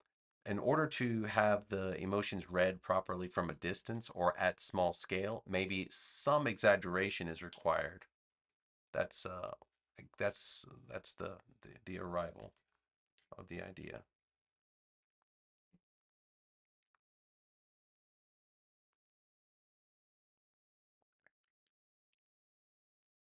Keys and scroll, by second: 3.5 super+=, 7.4 BackSpace, 13.8 super+z.